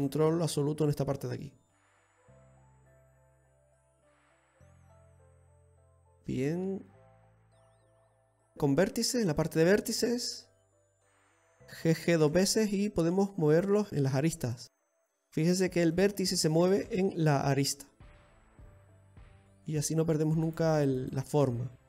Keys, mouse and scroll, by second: 1.0 click, 3.4 right click, 3.9 middle click, 4.9 click, 5.6 middle click, 8.2 shift+middle click, 8.5 click, 10.7 right click, 12.2 g, 13.9 right click, 15.9 right click, 16.6 g, 18.8 right click, 19.0 g, 21.0 right click, 21.2 g.